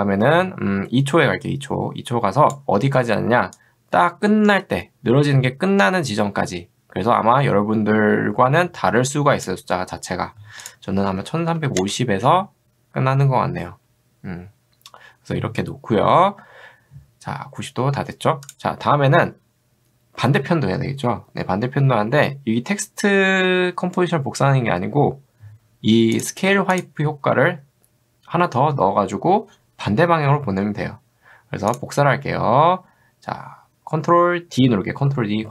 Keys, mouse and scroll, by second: 3.6-9.5 drag, 11.1 1, 11.5 5, 18.5 click, 26.2 click, 26.7 click.